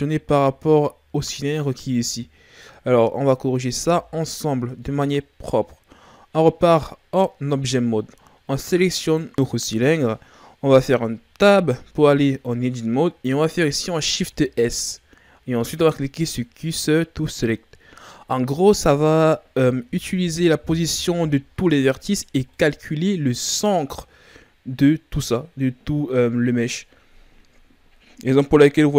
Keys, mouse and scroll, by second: 3.8 Tab, 8.9 right click, 11.5 Tab, 14.2 shift+s, 18.4-19.2 shift+scroll up 4, 19.9 KP_Divide, 21.0 KP_Divide, 22.2-22.5 shift+scroll down 3, 22.5 middle click, 22.9-23.5 scroll up 1, 23.5-26.5 middle drag, 28.6-28.9 middle drag.